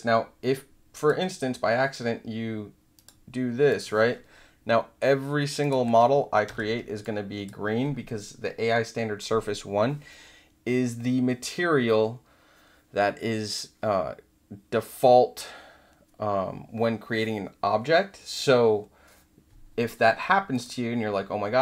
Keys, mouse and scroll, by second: 0.9 click, 2.9 click, 3.6 click, 5.6 click, 6.4 w, 7.0-7.4 drag, 20.5 click.